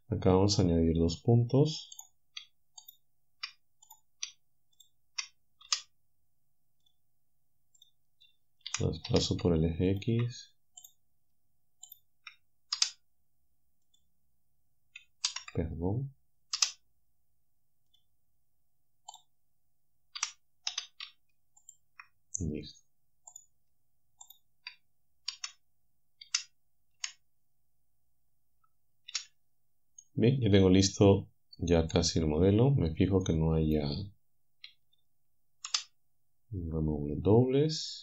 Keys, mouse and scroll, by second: 2.9 shift+right click, 4.8 shift+right click, 5.7 w, 8.7 g, 9.1 x, 9.9 ctrl+click, 10.9 click, 12.8 w, 13.9 click, 15.3 ctrl+z, 16.6 w, 17.9 click, 20.2 g, 20.7 x, 21.7 ctrl+click, 24.3 shift+click, 25.3 f, 29.1 a, 30.0 click, 33.2 shift+middle click, 34.7 a.